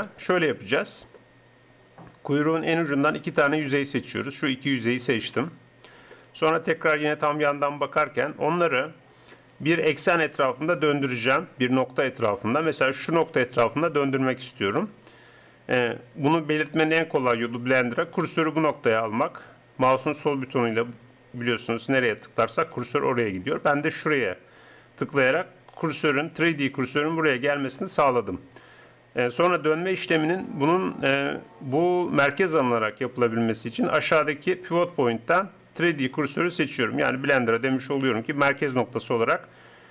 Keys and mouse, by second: 7.1 KP_3, 7.8-9.2 middle drag, 18.3-25.9 drag, 34.0-35.6 drag.